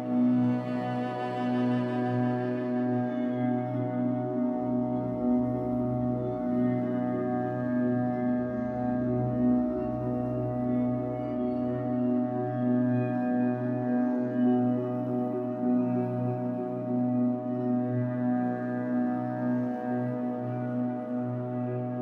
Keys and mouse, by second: 0.3 -, 2.0 click, 3.7 click, 6.4 click, 7.5 click, 8.2 Delete, 8.9 click, 9.3 click, 9.6-12.5 typing, 11.4 click, 11.9-15.0 drag, 15.2-17.5 typing, 18.1 click, 19.8-22.0 typing.